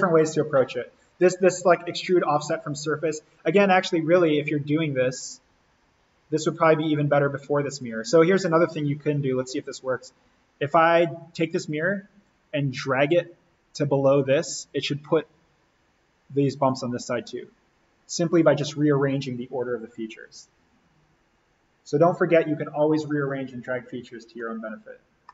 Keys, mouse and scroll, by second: 3.2-3.8 scroll down 1, 6.5 click, 11.3-16.6 drag, 25.2-25.3 middle drag.